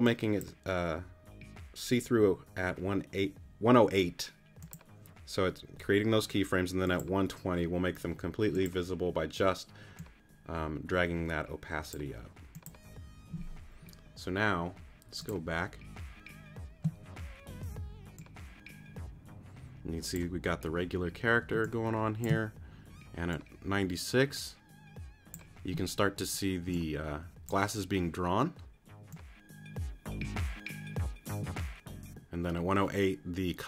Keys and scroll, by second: 21.5 space.